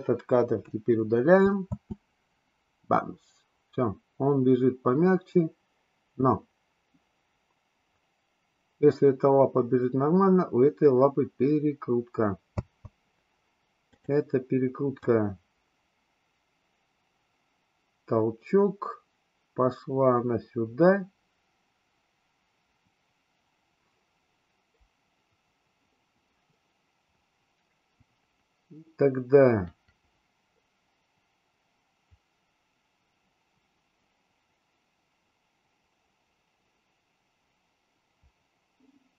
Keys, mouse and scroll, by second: 0.6 Delete, 1.6 space, 12.6 space, 13.9 click, 15.0-39.1 drag.